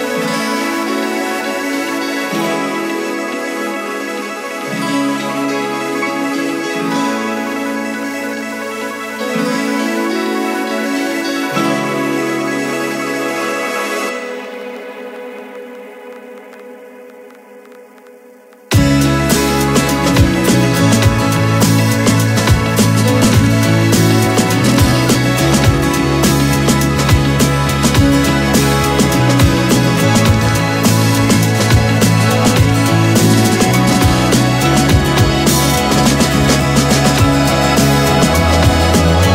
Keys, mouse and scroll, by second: 0.5 click, 2.6 KP_Add, 4.7 KP_9, 9.5 click, 18.3 ctrl+j, 19.6 shift+Down, 25.3 t, 25.7 click, 26.4-33.9 typing, 35.1 click.